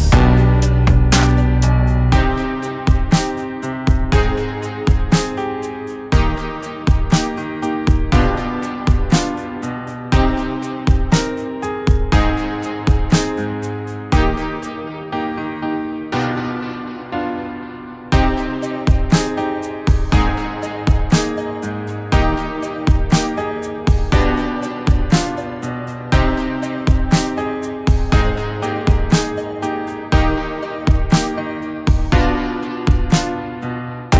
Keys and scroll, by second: 7.0 [, 7.0 [, 7.3 [, 32.1 ].